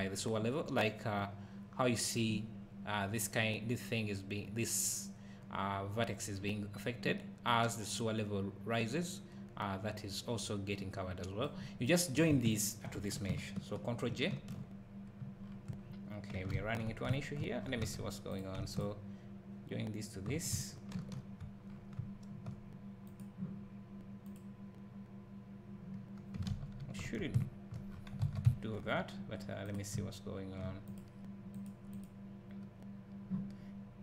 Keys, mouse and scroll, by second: 1.1 click, 7.4 click, 11.8 click, 12.5 shift+click, 14.2 ctrl+j, 15.4 scroll down 1, 16.6 ctrl+z, 17.1 `, 17.6 scroll up 1, 17.9 alt+a, 18.3 click, 18.7 shift+click, 21.0 ctrl+j, 21.7 scroll down 1, 22.0 `, 23.1 click, 26.6 ctrl+z, 27.4 `, 27.9 scroll up 1, 28.3 alt+a, 28.5 `, 29.6 click, 30.9 click.